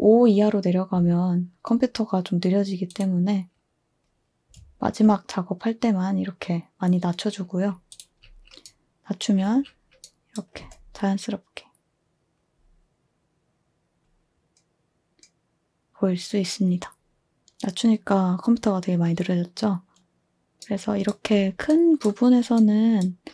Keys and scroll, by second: 10.6 space, 20.0 space.